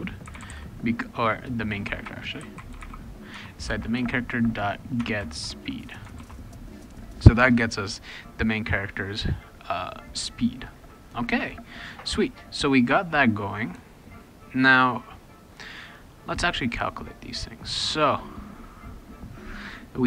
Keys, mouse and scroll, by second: 0.0-3.9 typing, 3.3 Tab, 5.0 Tab, 5.1-5.8 typing, 6.2 ctrl+s, 13.1-16.5 scroll down 2.